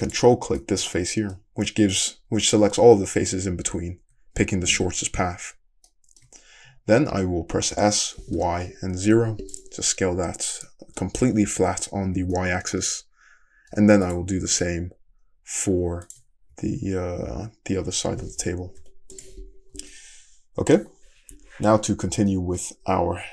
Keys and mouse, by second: 0.1 ctrl+click, 0.2-14.1 middle drag, 4.0 `, 7.7 s, 14.1 click, 16.1 ctrl+click, 16.2-22.2 middle drag, 16.5 `, 17.9 s, 19.6 Tab, 21.7 `, 22.6-23.3 middle drag.